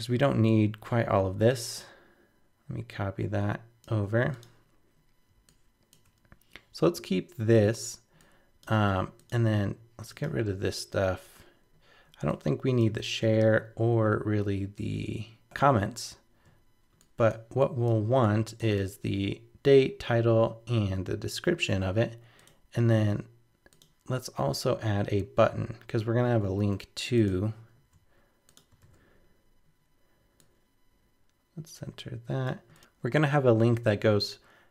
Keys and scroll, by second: 27.8 super+c, 28.8 super+v.